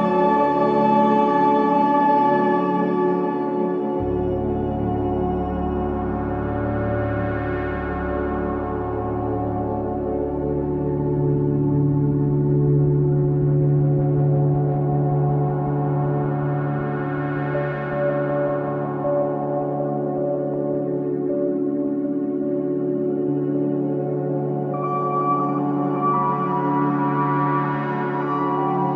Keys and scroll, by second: 5.9 ], 6.4 ], 9.3 4, 9.9 3, 13.6 ], 13.7 Delete, 15.1 ], 17.1 ], 19.2 ], 26.5 ], 28.6 4.